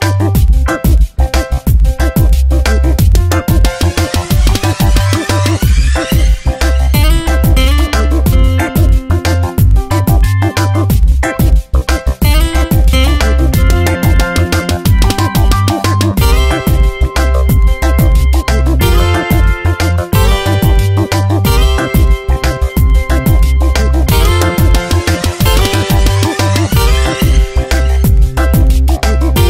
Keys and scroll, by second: 2.7 ctrl+t, 7.3 Return, 7.9 Down, 9.5 space, 10.5 ctrl+t, 12.4 Tab, 19.4 Return, 20.0 f, 23.8 ctrl+shift+n, 24.3 Return, 24.8 v, 25.1 Tab, 25.5 v, 25.7 Tab, 27.9 v.